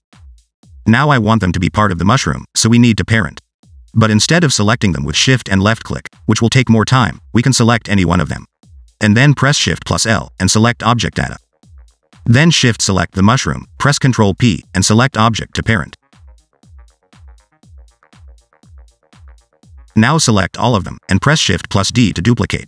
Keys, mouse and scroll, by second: 0.4 middle click, 0.7 shift+middle click, 1.2 click, 1.6 g, 3.2 click, 4.7 middle click, 5.1 scroll up 2, 5.5 shift+click, 5.8 shift+click, 6.2 shift+click, 6.8 shift+click, 7.9 click, 8.7 click, 10.3 shift+l, 11.8 scroll down 1, 11.9 middle click, 14.2 shift+click, 15.3 ctrl+p, 16.9 click, 17.4 g, 19.5 scroll down 2, 19.7 shift+middle click, 21.6 click, 22.4 g.